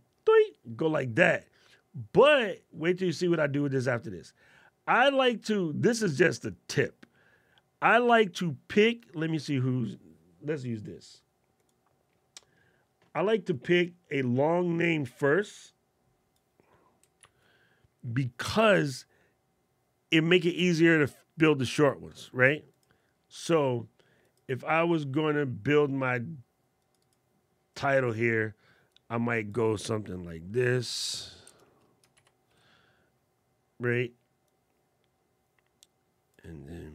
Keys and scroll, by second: 17.0 super+c, 32.3 super+Caps_Lock.